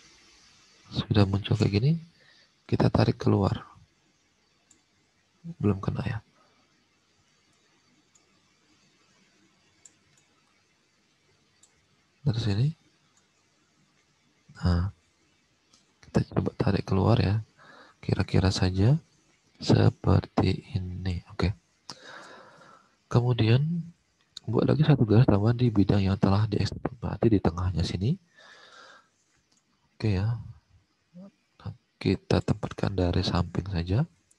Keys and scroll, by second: 22.3 alt+Tab, 28.4 alt+Tab.